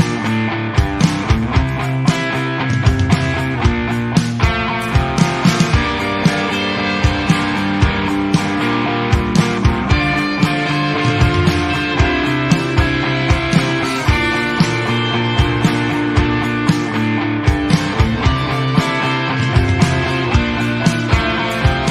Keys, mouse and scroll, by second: 3.8-4.3 shift+middle drag, 4.3 scroll down 1, 4.4-5.6 middle drag, 5.6-6.0 scroll up 1, 6.0 drag, 6.6 click, 7.0-7.8 shift+middle drag, 7.8 shift+a, 8.5 s, 9.2-9.6 scroll down 1, 9.6 KP_1, 10.0-10.3 scroll up 1, 10.3 ctrl+z, 10.5 ctrl+z, 11.1 shift+s, 12.0 shift+a, 12.6 scroll down 3, 12.7-13.2 middle drag, 13.2-13.5 scroll up 1, 13.5 s, 14.1 g, 14.8 s, 15.2 scroll down 2, 15.4-16.6 shift+middle drag, 16.6 ctrl+alt+KP_0, 17.1-17.9 scroll up 2, 17.9 click, 18.6-20.0 middle drag, 20.0 alt+a, 20.4 click, 21.0 click.